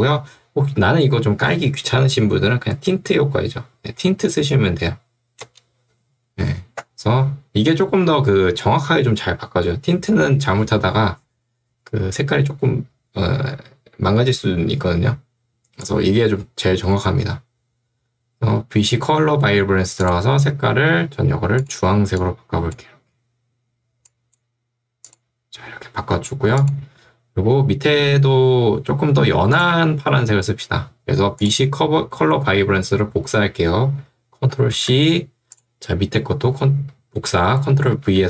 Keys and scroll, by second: 5.5 Return, 34.8 ctrl+c, 38.0 ctrl+v.